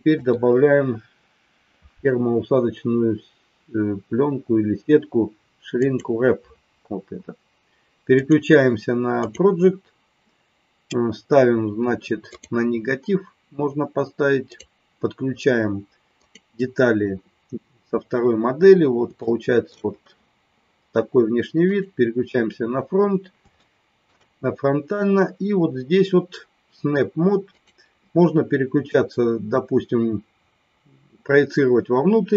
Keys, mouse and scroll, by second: 0.1-6.3 drag, 8.2-9.7 drag, 14.5-17.4 drag, 19.2 shift+middle click, 22.2 click, 23.6 shift+middle click, 27.5-32.3 drag.